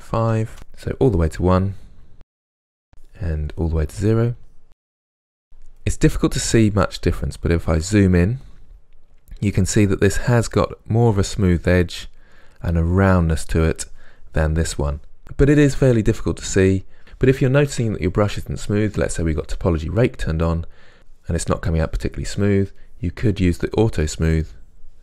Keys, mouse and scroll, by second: 3.7 middle click, 4.5 click, 5.0-19.3 middle drag, 19.3-21.5 drag, 21.5-22.8 middle drag, 22.8 click, 23.7 middle click, 24.3 click.